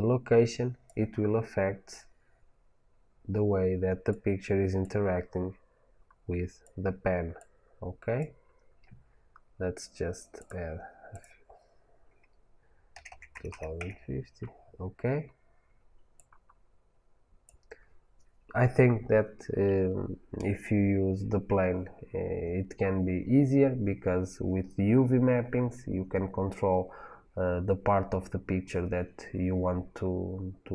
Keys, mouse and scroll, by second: 11.0-30.7 drag, 13.4 KP_0, 13.9 KP_Enter.